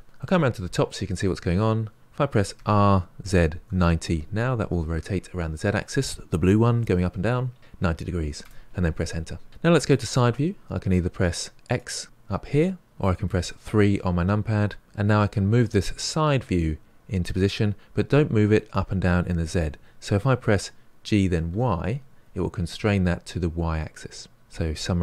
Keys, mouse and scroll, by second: 0.2-2.5 middle drag, 2.5 r, 11.6 click, 13.2 KP_3, 15.1 g.